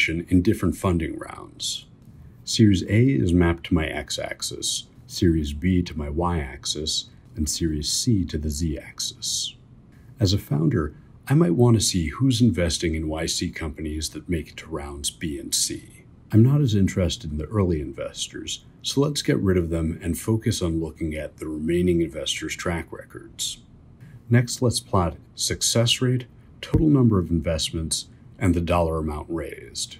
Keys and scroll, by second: 1.9 2, 2.7 Escape, 3.7-7.0 typing, 8.8 3, 10.5 1, 11.1 2, 11.6 2, 12.1 3, 17.6 BackSpace.